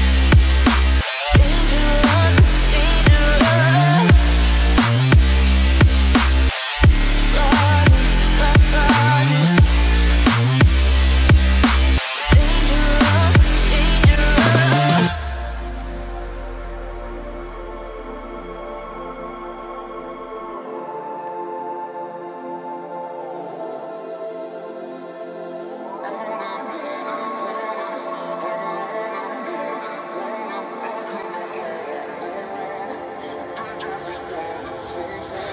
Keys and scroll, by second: 10.6 ctrl+alt+z, 31.3 ctrl+t, 34.2 Return.